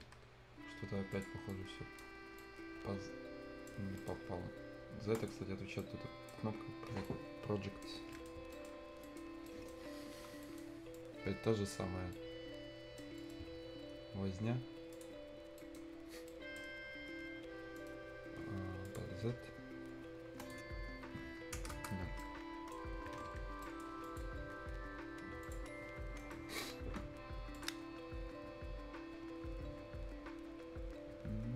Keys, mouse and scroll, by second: 0.1 shift+Escape, 1.1 shift+click, 1.5 shift+right click, 2.0 shift+scroll down 1, 2.2 shift+scroll up 1, 2.4-3.8 shift+right drag, 3.8 shift+scroll up 1, 4.0 shift+right click, 5.2 shift+click, 5.8 shift+right click, 6.5-6.8 shift+scroll up 1, 6.8 shift+scroll down 1, 7.4 shift+right click, 7.9 shift+scroll up 1, 8.1 shift+right click, 8.3 shift+scroll down 1, 8.5 shift+right click, 9.0 shift+right click, 9.3-9.8 shift+scroll down 2, 9.5 shift+right click, 10.1 shift+F10, 10.2 shift+scroll up 1, 10.4 shift+right click, 10.6 shift+scroll down 1, 10.9 shift+click, 11.9 shift+scroll up 1, 12.1 shift+right click, 13.2 shift+middle click, 14.9 shift+click, 15.2 shift+scroll up 1, 15.8 shift+right click, 15.9 shift+scroll down 1, 16.1 shift+scroll up 1, 16.6 shift+scroll down 1, 17.0 scroll up 2, 17.8 shift+middle click, 18.9 shift+click, 19.2-19.5 shift+scroll down 1, 20.4 shift+click, 20.7-21.1 shift+scroll up 1, 21.1 shift+scroll down 1, 21.7 shift+Return, 22.1 shift+scroll up 1, 22.2 shift+right click, 23.0 shift+Escape, 23.5 shift+scroll up 1, 23.6 shift+right click, 24.0 shift+click, 25.7 shift+scroll down 1, 25.9-27.5 shift+scroll up 2, 26.2 shift+middle click, 27.5 shift+click, 28.0 shift+scroll up 1.